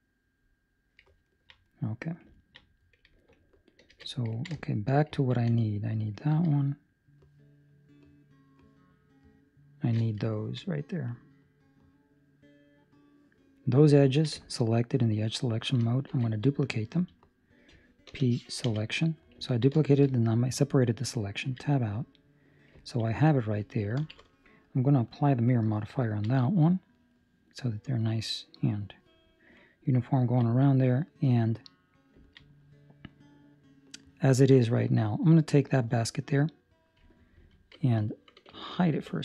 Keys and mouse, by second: 1.2 ctrl+middle click, 1.6 middle click, 2.3 ctrl+middle click, 3.2 alt+right click, 4.3 ctrl+middle click, 4.5 shift+middle click, 5.0 ctrl+middle click, 5.9 alt+right click, 7.0 alt+shift+right click, 8.0 alt+shift+right click, 10.2 alt+shift+right click, 10.3 ctrl+middle click, 10.6 middle click, 14.0 ctrl+middle click, 14.3 shift+middle click, 14.6 middle click, 16.0 shift+d, 19.3 p, 19.4 ctrl+middle click, 19.7 shift+middle click, 20.0 middle click, 21.4 Tab, 22.2 right click, 22.9 ctrl+middle click, 23.0 middle click, 24.0 ctrl+space, 25.0 click, 26.0 ctrl+middle click, 26.5 middle click, 27.1 middle click, 27.1 ctrl+middle click, 29.5 middle click, 30.2 ctrl+middle click, 30.4 middle click, 31.5 middle click, 32.0 ctrl+middle click, 32.2 middle click, 32.3 ctrl+middle click, 32.5 middle click, 35.2 right click, 37.1 Escape, 37.1 right click, 38.2 Escape, 38.9 h.